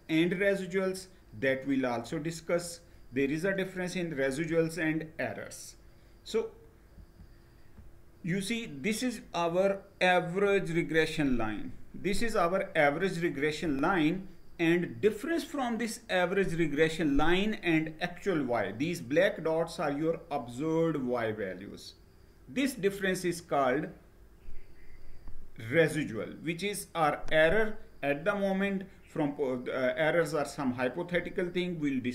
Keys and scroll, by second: 6.6 Down.